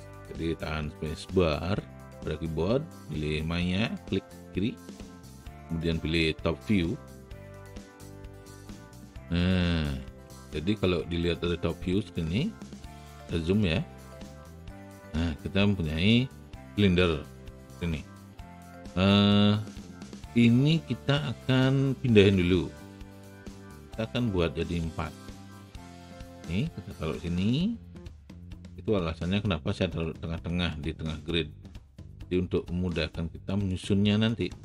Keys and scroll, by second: 1.7 space, 22.4 w.